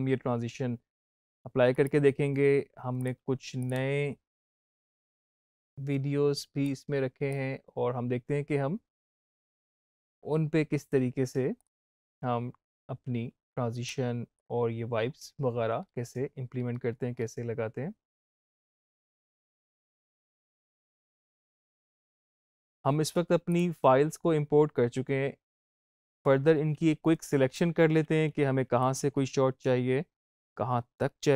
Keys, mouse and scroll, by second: 1.6 right click, 2.9 click, 6.5-15.7 drag, 15.7-17.0 scroll down 1, 17.0-17.5 scroll up 1, 20.5 click, 23.4 click, 25.8-28.8 drag, 28.8 i.